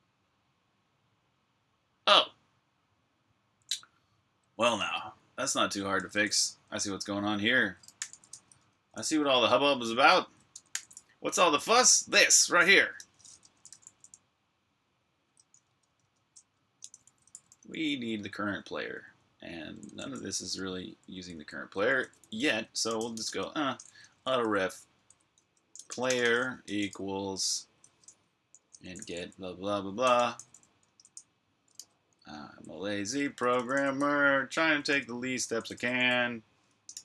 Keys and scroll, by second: 4.6 super+Tab, 7.8 typing, 8.3 super+], 10.5 j, 11.6-13.6 typing, 14.8-20.6 typing, 21.8-23.5 typing, 25.3-26.8 typing, 28.5 Escape, 28.7-32.2 typing, 33.2-35.9 typing.